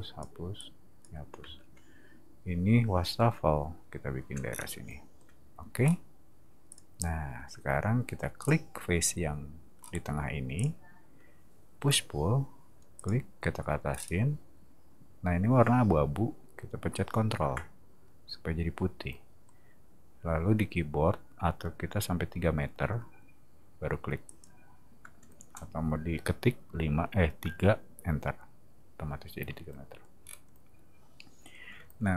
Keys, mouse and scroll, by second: 0.5 click, 1.4 space, 4.5 scroll down 2, 5.8 middle click, 6.7 click, 8.4 scroll down 2, 9.8-10.5 middle drag, 10.5 click, 11.8 p, 13.0 click, 13.9 middle click, 24.3 click, 30.2 scroll up 2.